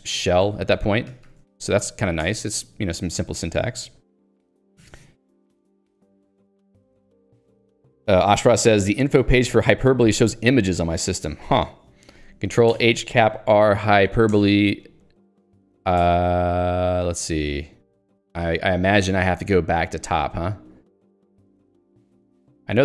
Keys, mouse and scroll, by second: 0.0-1.0 typing, 0.0 Delete, 1.1 ctrl+g, 1.5 Escape, 2.3 ctrl+g, 2.6 Escape, 13.4-14.5 typing, 15.4 ctrl+d, 18.7 click, 18.9 middle click, 20.1 click, 20.2 middle click, 21.1 ctrl+d.